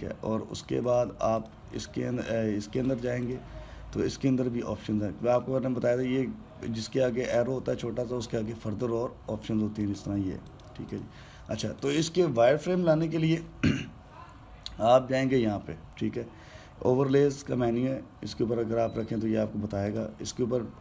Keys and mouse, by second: 2.1-3.6 drag, 4.0-9.7 drag, 11.2 click, 20.6-20.8 drag.